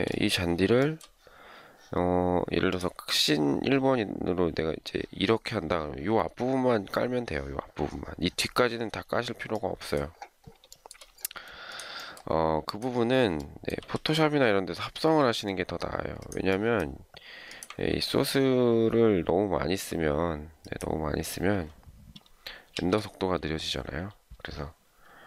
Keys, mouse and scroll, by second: 0.8 shift+middle click, 10.7 shift+middle click, 13.8 m.